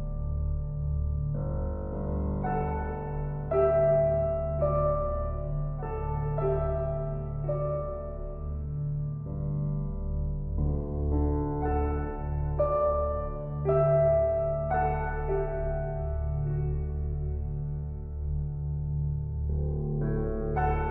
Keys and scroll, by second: 18.5 Return, 19.7 [.